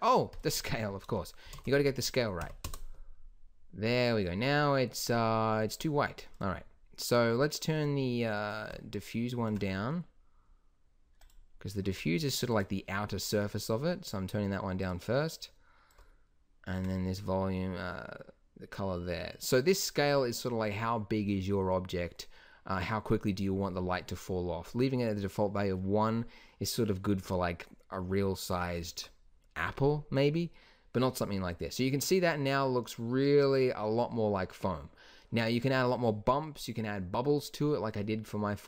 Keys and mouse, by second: 0.3-2.3 drag, 6.3-14.1 drag, 14.8-18.5 drag.